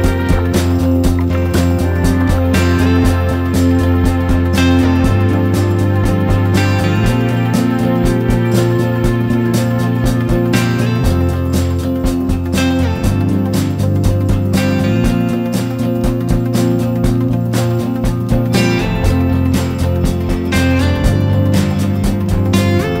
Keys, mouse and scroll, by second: 0.1 click, 2.1 F4, 2.4 click, 4.6 ctrl+g, 5.3-6.4 drag, 6.7 Down, 6.8 Down, 6.9 Down, 8.8 click, 11.9 Down, 12.0 Down, 12.2 Down, 13.5 click, 20.1-21.2 drag, 21.5 Down, 21.6 typing.